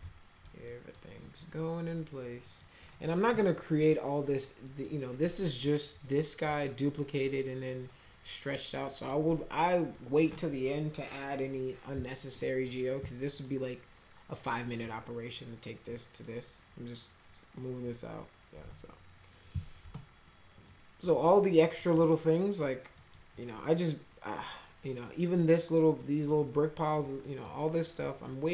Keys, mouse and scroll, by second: 0.1 alt+middle click, 0.7 middle click, 1.2 middle click, 2.5 middle click, 2.9 middle click, 4.7 middle click, 8.9 middle click, 10.0 middle click, 12.4 middle click, 13.1 middle click, 20.7 middle click, 21.6 middle click, 22.0 middle click, 23.0 middle click, 26.0 middle click, 27.3 middle click, 28.0 middle click.